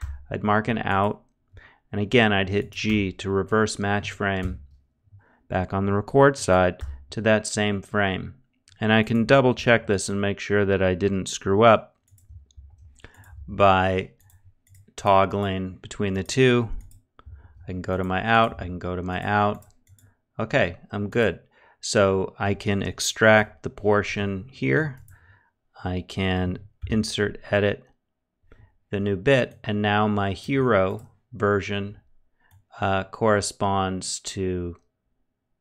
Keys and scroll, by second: 2.4 g, 3.9 ctrl+z, 6.3 e, 9.1 shift+e, 12.0 shift+w, 16.9 shift+e, 19.1 shift+e, 22.9 F12, 26.3 F2.